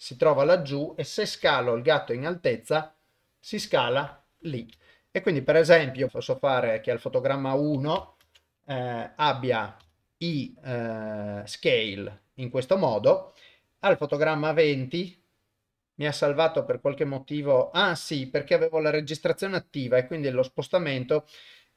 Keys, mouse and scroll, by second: 1.3 s, 4.8 shift+middle click, 8.3 ctrl+s, 9.8 i, 13.9-15.7 drag, 15.7 n, 21.5-21.7 drag.